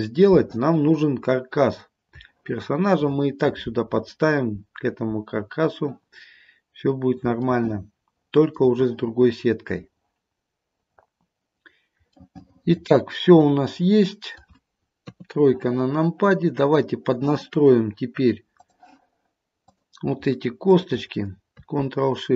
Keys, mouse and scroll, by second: 1.2-2.0 scroll down 2, 2.0-2.4 scroll up 1, 2.4 shift+middle click, 7.5 shift+middle click, 12.3 middle click, 14.4 middle click, 15.1 KP_3, 19.7 click, 20.8 shift+click.